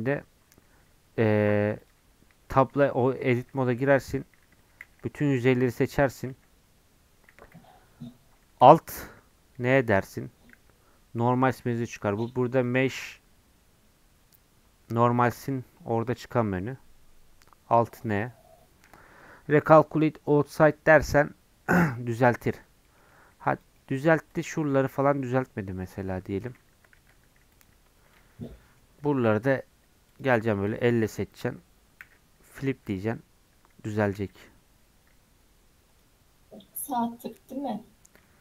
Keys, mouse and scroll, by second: 0.6 Tab, 1.3 click, 1.5 Tab, 1.8 click, 2.3 Tab, 4.1 3, 4.8 a, 9.7 alt+n, 12.5-22.1 drag, 22.1-23.5 middle drag, 23.5 click, 23.7 middle click, 24.3-25.3 shift+drag, 25.3-27.0 right drag, 27.0 alt+n, 28.1 Tab, 28.5 middle click, 29.3 Tab, 30.1 click, 30.4 click, 31.0-32.0 shift+middle drag, 32.0 alt+n, 32.9 Tab, 33.1-34.2 middle drag, 34.2 z, 35.9-37.3 drag, 37.3-38.4 middle drag.